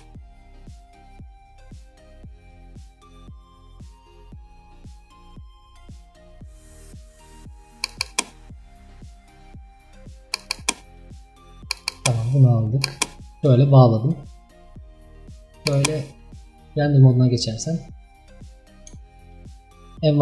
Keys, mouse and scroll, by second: 0.8 click, 2.3-5.6 drag, 6.2-12.0 drag, 13.4 click, 15.7 click, 16.6-17.3 scroll down 3, 17.9-19.0 middle drag, 19.0-19.4 scroll down 2, 19.4-19.9 shift+middle drag, 19.9 scroll up 3.